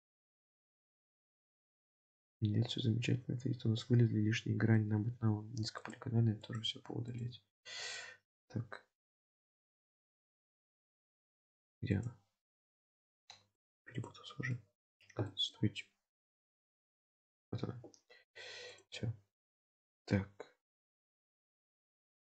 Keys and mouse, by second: 5.8 click, 6.4 click, 7.1 click, 9.8 click, 10.2-11.2 middle drag, 12.0 click, 12.8 click, 13.6 click, 13.9 click, 14.7 middle click, 15.3 middle click, 16.6 click, 18.8 click, 21.6 3, 22.0 click.